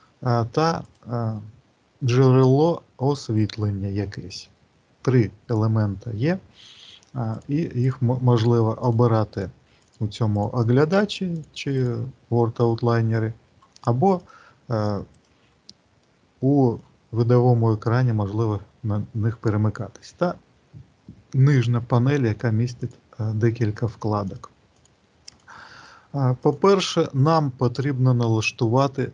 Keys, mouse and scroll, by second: 0.8 click, 7.2 click, 7.7 click, 8.2 click, 8.8 click, 9.2 click, 9.7 click, 10.2 click, 10.8 click, 11.3 click, 11.7 click, 14.0 click, 15.0 click, 15.8 middle click, 22.7 click, 23.7 click, 24.0 click, 24.5 click, 25.2 click, 25.7 click, 26.2 click.